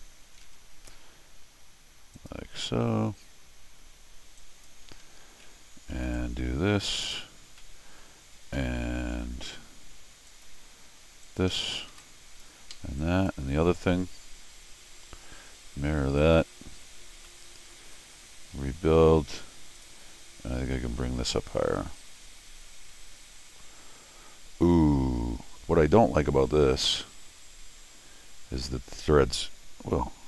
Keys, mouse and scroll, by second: 0.7 alt+l, 2.1 click, 4.4 click, 4.9 Escape, 5.0 Escape, 5.3 middle click, 5.3 scroll, 6.0 t, 6.1-7.1 drag, 7.6 middle click, 8.6 Escape, 9.1 l, 10.3 click, 11.2 click, 11.5 Escape, 11.9 t, 12.0 click, 12.7 Escape, 13.0 click, 16.2 click, 17.2 scroll down 1, 17.3 middle click, 19.8 click, 21.8-30.2 drag.